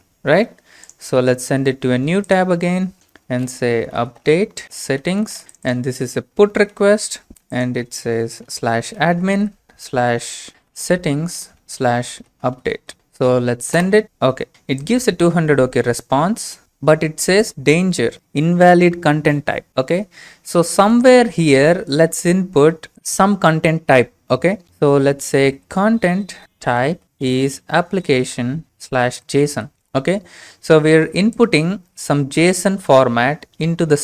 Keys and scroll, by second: 3.5-13.3 typing, 13.7 ctrl+space, 24.6 Return, 25.3-30.1 typing.